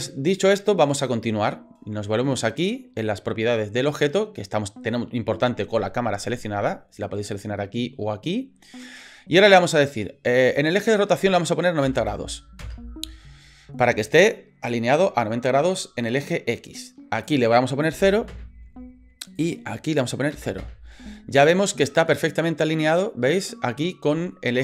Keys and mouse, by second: 4.0 click, 10.7-13.5 drag, 17.3-19.0 drag, 19.4-21.3 drag, 22.0-23.9 middle drag.